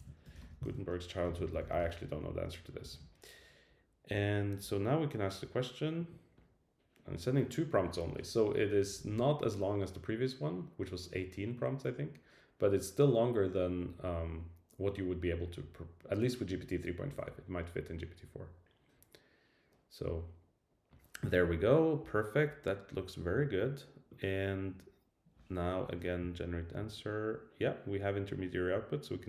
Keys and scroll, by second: 0.0 alt+shift+Right, 0.6 super+Right.